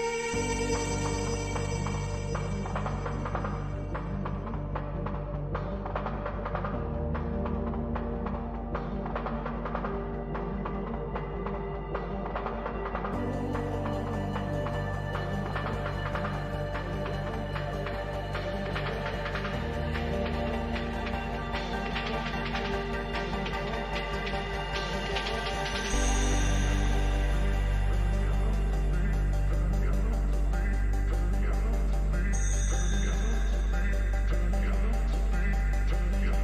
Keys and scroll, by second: 28.6 ctrl+-.